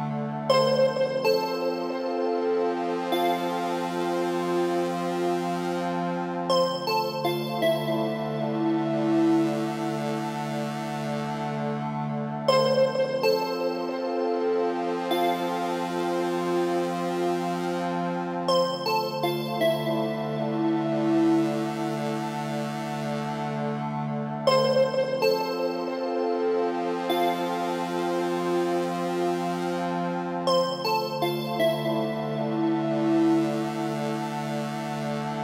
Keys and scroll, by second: 20.8 BackSpace, 28.7 Up.